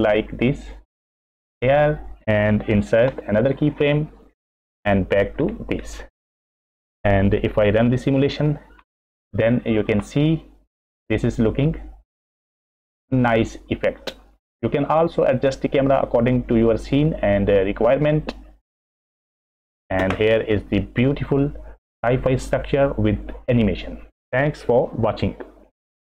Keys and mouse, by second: 3.1 i, 4.7 click, 8.3 click, 10.0 space, 11.5 click, 20.0 space.